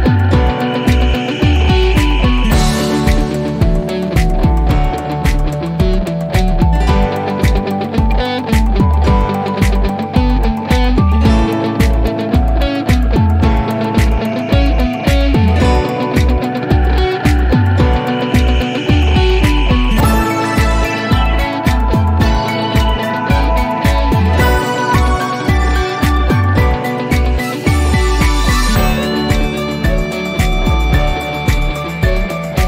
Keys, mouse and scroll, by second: 3.0 click, 3.9 scroll up 1, 6.1 scroll down 1.